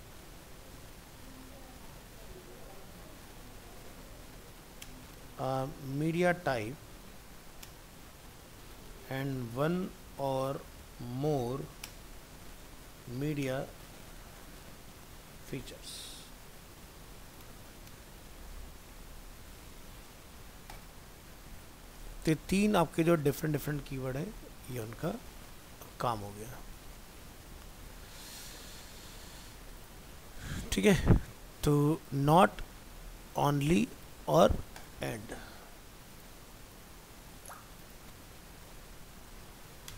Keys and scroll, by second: 19.4 ctrl+s.